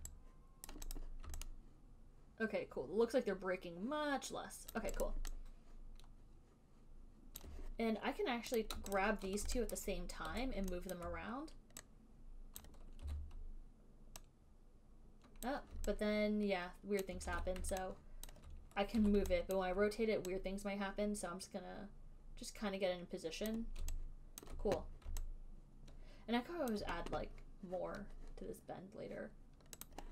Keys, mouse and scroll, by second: 0.2 alt+right click, 1.0 right click, 1.3 click, 5.0 alt+click, 5.3 right click, 7.7 alt+click, 8.9 click, 9.2 shift+click, 10.1 alt+middle click, 10.6 w, 11.3 alt+click, 12.9 click, 13.3 e, 15.7 click, 17.3 alt+click, 17.5 ctrl+z, 18.6 alt+click, 19.2 w, 19.9 alt+click, 23.8 click, 24.7 alt+click, 27.0 click.